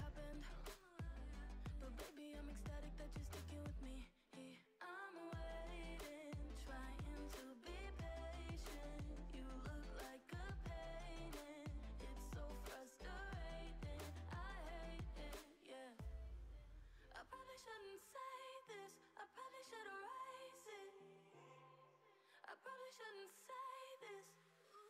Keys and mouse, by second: 2.6-3.9 drag, 3.9 BackSpace, 4.0 BackSpace, 5.0 o, 6.5 Tab, 6.9 click, 7.6 Tab, 8.4 s, 8.7 a, 10.6 q, 11.7 Tab, 13.0 click, 13.3-14.4 drag, 14.4-15.5 typing, 18.7 click, 20.6 Tab, 21.6 a, 22.0 q, 23.0 Tab, 23.6 click.